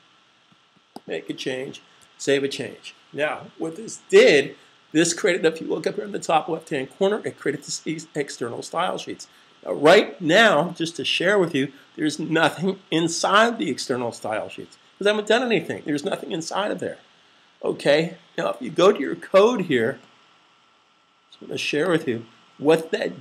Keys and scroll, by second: 1.9 super+s.